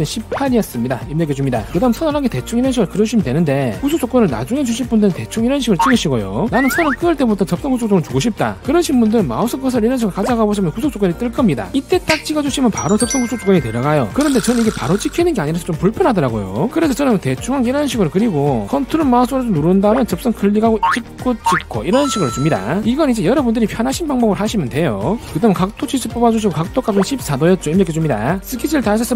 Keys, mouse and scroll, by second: 0.3 click, 0.6 1, 2.2 1, 2.9 click, 6.3 click, 12.8 click, 16.3 click, 17.4 1, 17.6 click, 18.7 click, 19.9 ctrl+right click, 20.6 click, 21.3 click, 21.9 click, 25.6 click, 26.5 click, 26.9 click, 27.1-28.1 typing.